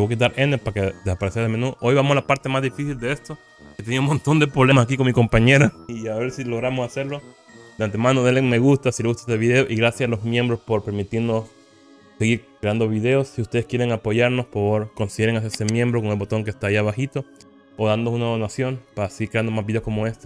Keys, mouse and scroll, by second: 0.5 n.